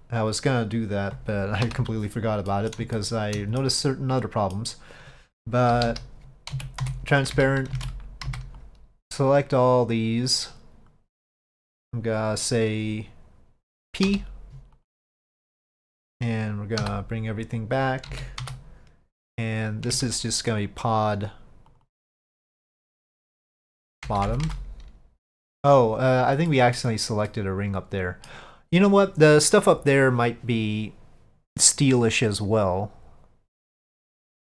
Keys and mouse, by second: 2.6 middle click, 3.1 middle click, 3.9 middle click, 5.8 KP_5, 6.6 z, 8.3 c, 16.9 KP_Divide, 18.2 z, 19.3 click, 20.0 Tab, 20.7 click, 21.8-27.2 drag, 24.3 BackSpace, 27.4-28.3 middle drag.